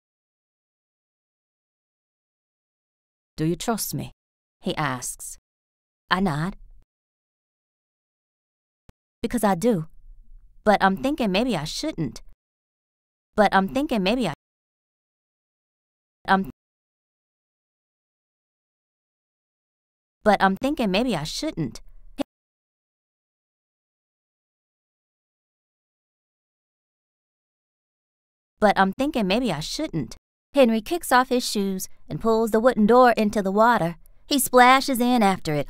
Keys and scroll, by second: 0.4 b, 2.1 a, 3.0 space, 5.4 t, 6.5 t, 6.7 space, 7.3 b, 8.8 space, 9.0 r, 10.6 b, 12.2 space, 13.3 t, 14.2 space, 16.1 space, 19.1 BackSpace, 19.8 space, 22.1 space, 24.0 b, 27.0 shift+3, 28.0 3, 28.1 space, 29.1 r, 29.9 t, 34.6 b.